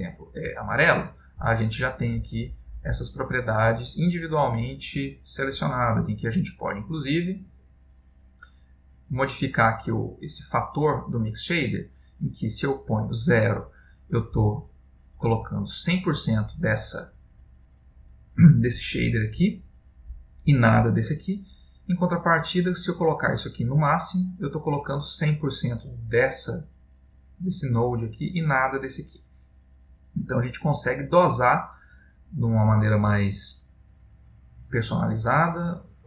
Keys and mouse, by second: 2.2 click, 3.4 click, 4.8 click, 6.5 click, 9.9 click, 14.6 click, 20.5 click, 22.2 click, 25.5 click, 30.0 click.